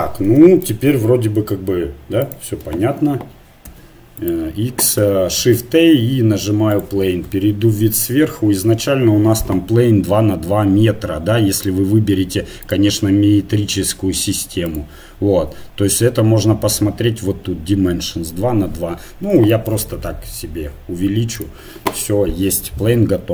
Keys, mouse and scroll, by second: 0.6-3.7 right drag, 3.7 x, 5.4 shift+a, 7.2 KP_7, 11.6-14.7 drag, 18.8-20.0 middle drag, 20.0 s.